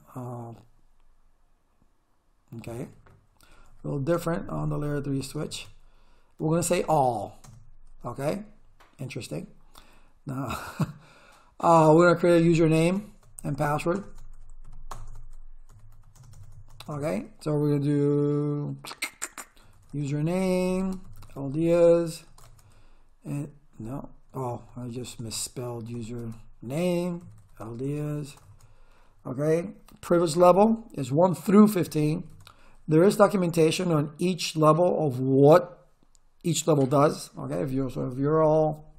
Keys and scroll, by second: 2.4-7.1 typing, 7.4 Return, 11.5-16.4 typing, 19.4-22.5 typing, 24.3 BackSpace, 26.2 Tab, 27.0-28.5 typing, 31.6-32.7 typing.